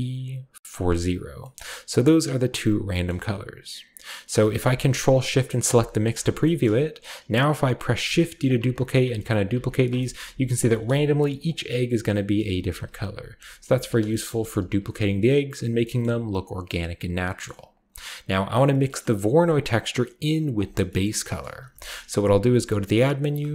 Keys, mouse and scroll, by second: 1.3-1.9 middle drag, 1.5-2.7 scroll up 1, 1.9-2.7 drag, 2.8-4.5 scroll down 1, 3.0-4.5 middle drag, 5.6 ctrl+shift+click, 6.0 typing, 6.2 ctrl+scroll down 1, 6.4 shift+middle drag, 8.0-11.1 typing, 8.4 click, 8.8 shift+drag, 9.4 shift+click, 9.7 shift+click, 9.9 shift+middle drag, 10.5 shift+drag, 11.5-12.4 shift+scroll down 1, 12.2-14.8 typing, 12.4-13.2 ctrl+scroll down 1, 13.6 ctrl+z, 14.0-17.7 shift+middle drag, 14.2-14.7 shift+scroll up 1, 17.7 click, 18.4-19.5 scroll down 1, 19.5 click, 19.5-20.5 scroll down 1, 20.5-23.2 drag, 20.8-22.4 scroll down 3, 21.2 middle click, 21.6 g, 21.9 middle click, 22.4 shift+a, 23.3-23.5 shift+drag.